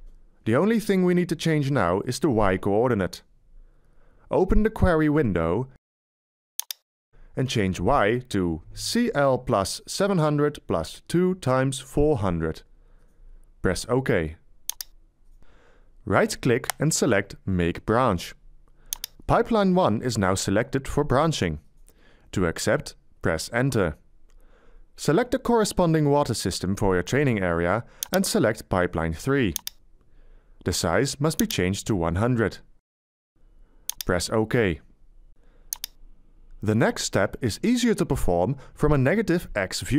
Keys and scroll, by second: 5.0 c, 8.9 c, 9.4 l, 10.1 7, 24.4 Return.